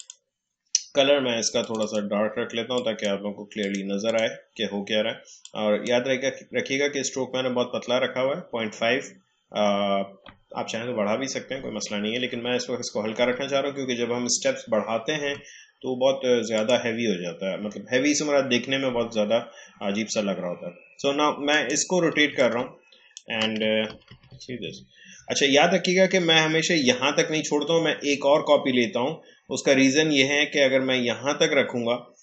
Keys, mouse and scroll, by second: 16.5 click, 21.5 click, 22.3-23.9 alt+drag, 23.9 ctrl+d.